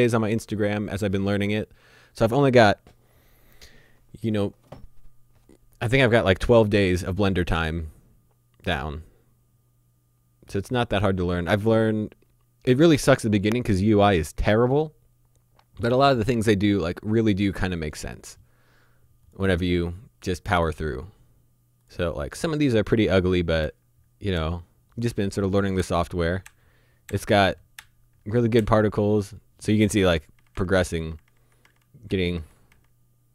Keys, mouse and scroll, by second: 17.8 click, 21.8 click, 23.6 Right, 30.4 Left.